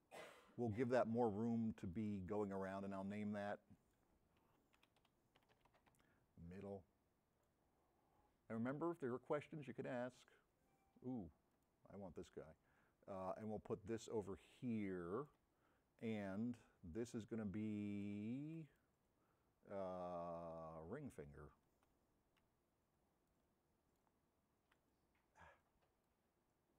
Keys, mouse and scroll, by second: 2.4 click, 7.4 click, 9.1 click, 11.6-15.4 drag, 13.5 m, 15.8 middle click, 17.8 m, 18.6 n, 21.8 n, 22.7 m, 25.9 m, 26.1-26.7 drag.